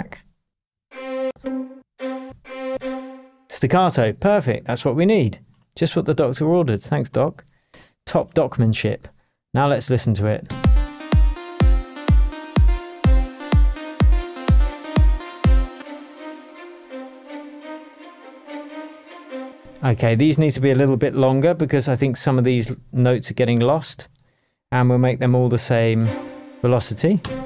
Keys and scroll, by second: 0.5 Down, 2.7 Up, 10.4 space, 19.4 space, 20.4 space, 22.4 super+a, 25.2 super+a, 27.2 super+space.